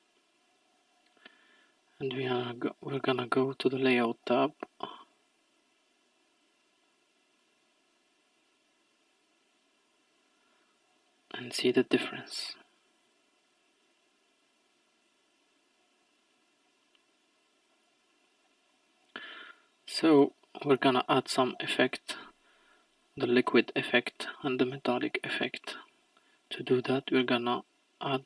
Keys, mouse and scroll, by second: 1.2 click, 4.0-4.9 scroll down 1, 4.9-6.9 middle drag, 6.9-10.5 drag, 18.1-18.6 scroll up 4, 19.6-20.2 scroll up 1, 20.2-21.2 scroll down 1, 22.8-24.0 scroll up 6, 24.0-24.5 scroll down 2, 24.7-26.8 scroll down 4.